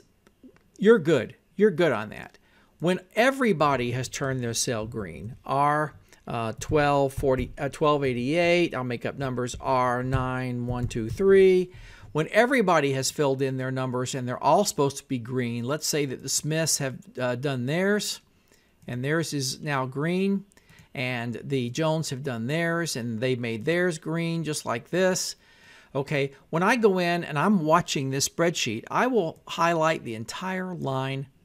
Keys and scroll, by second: 5.1 shift+r, 6.4-7.5 typing, 8.0 Tab, 9.6-11.6 typing.